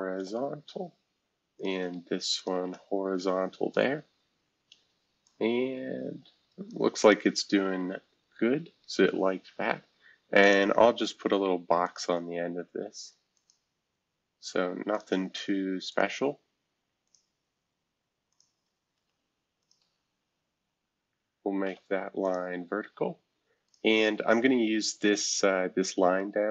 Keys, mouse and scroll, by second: 0.2 typing, 1.5 click, 2.4 shift+click, 3.1 typing, 5.2-6.7 drag, 7.0 click, 10.4 click, 11.8 click, 13.3 click, 14.9 click, 15.9 click, 17.0 click, 18.3 click, 18.9 Escape, 19.6 click, 21.6 v, 22.2 click, 23.6-24.9 drag, 24.9-25.8 scroll up 1, 25.8-26.5 scroll up 1.